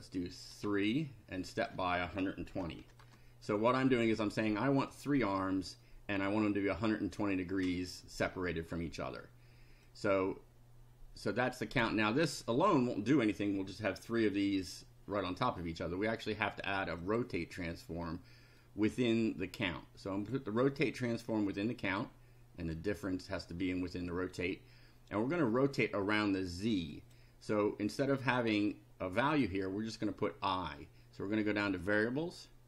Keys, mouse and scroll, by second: 0.5 3, 1.4 click, 2.2-3.5 typing, 3.5 click, 9.9-11.9 drag, 17.0 click, 18.6-20.5 drag, 21.6-22.9 drag, 26.9 click, 31.8 click.